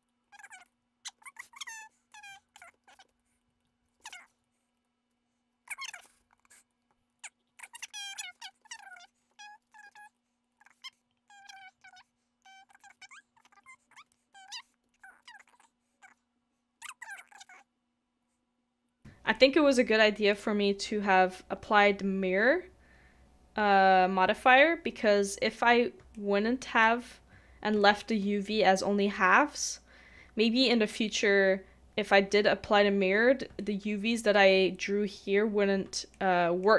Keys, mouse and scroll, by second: 0.7 middle click, 1.2 ctrl+s, 1.4 middle click, 2.4 middle click, 2.8 ctrl+z, 2.9 middle click, 3.1 middle click, 4.0 ctrl+z, 4.1 middle click, 6.3 middle click, 7.2 scroll up 1, 7.3 scroll down 1, 7.5 middle click, 7.7 shift+middle click, 8.0 scroll up 1, 8.2 shift+middle click, 8.3 shift+middle click, 8.6 shift+middle click, 8.9 shift+middle click, 14.4 scroll up 1, 14.5 shift+middle click, 14.9 shift+middle click, 25.9 middle click, 26.1 shift+middle click, 27.8 shift+middle click, 33.5 shift+i, 33.6 shift+middle click, 36.1 shift+middle click.